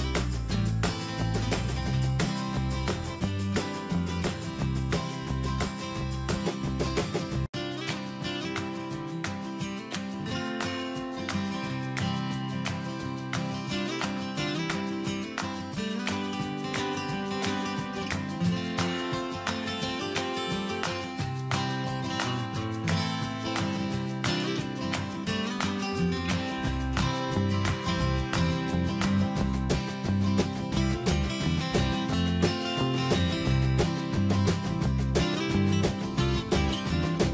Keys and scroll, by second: 4.3 Return, 15.9 ctrl+t, 21.5 Return, 27.1 Return, 30.0 ctrl+z, 33.4 ctrl+space.